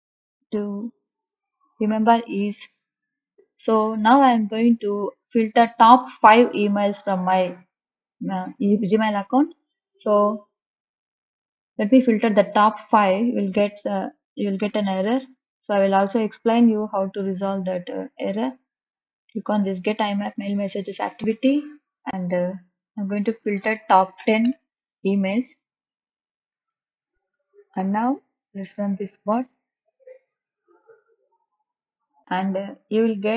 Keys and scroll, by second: 24.5 BackSpace.